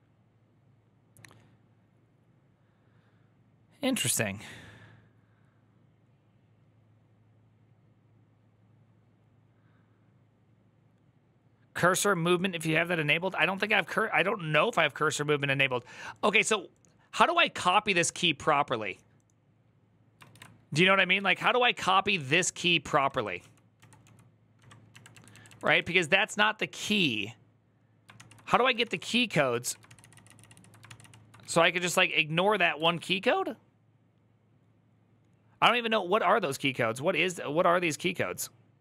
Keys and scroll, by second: 13.4 alt+{, 20.1 ctrl+;, 20.7-25.2 typing, 27.7-29.9 typing, 30.0 ctrl+c, 31.2 q, 31.7 ctrl+c.